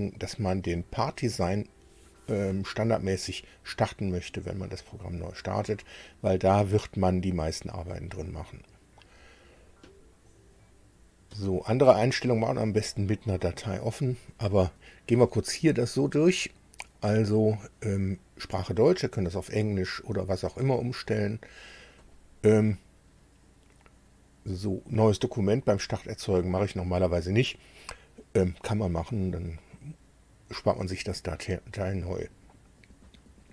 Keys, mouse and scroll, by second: 0.8 click, 20.0 click, 20.8 click, 22.0 click.